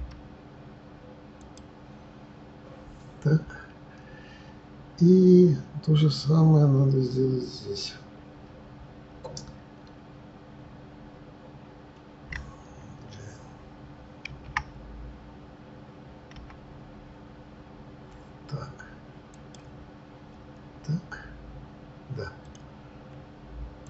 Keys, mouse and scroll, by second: 0.0 g, 14.3 shift+d, 20.6-21.1 scroll up 3, 22.5 click, 23.8 click.